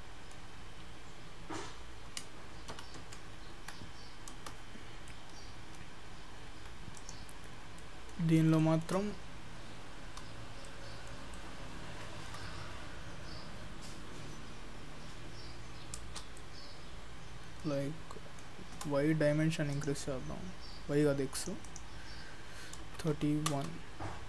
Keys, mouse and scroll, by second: 2.1 g, 5.1 middle click, 5.8-6.6 scroll down 1, 6.6 Tab, 7.0 click, 7.8 middle click, 8.7 shift+middle click, 10.8 shift+middle click, 12.3 shift+middle click, 15.9-16.4 scroll up 2, 16.4 shift+middle click, 19.8 click, 21.7 click.